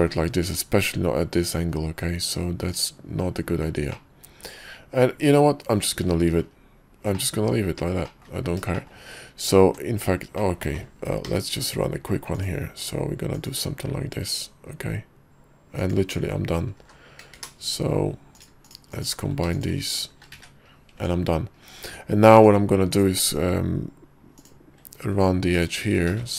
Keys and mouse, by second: 0.1 shift+middle click, 0.5 Tab, 2.8 click, 5.7 middle click, 6.0 Tab, 6.1-7.2 middle drag, 7.2 click, 8.2 click, 8.9 shift+middle click, 9.7 Tab, 10.5 click, 11.4 k, 18.5 click, 18.8 shift+click, 19.6 shift+click, 20.0 shift+click, 20.4 middle click, 20.4 1, 21.1 Tab, 22.0 Tab, 22.5 Tab, 23.0 click, 24.5 click, 25.6 ctrl+click, 26.2 ctrl+z.